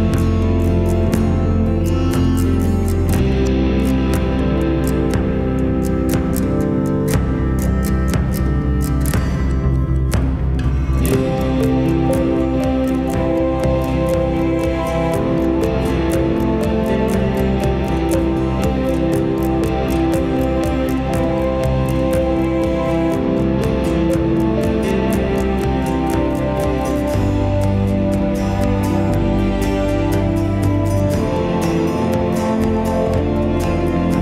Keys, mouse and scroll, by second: 0.1 shift+scroll down 1, 0.8 shift+scroll up 1, 1.3 shift+middle click, 8.8 shift+middle click, 14.8 shift+middle click, 16.4 shift+middle click, 20.7 w, 21.1 right click, 25.8 right click, 33.3 scroll up 1.